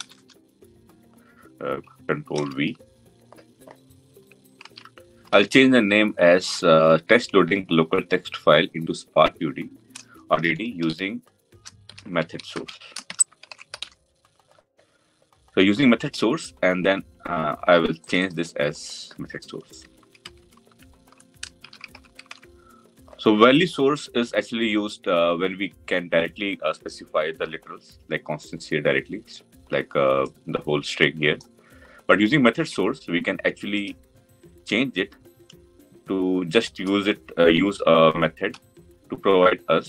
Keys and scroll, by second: 1.6 ctrl+c, 2.3 ctrl+v, 38.2 Delete.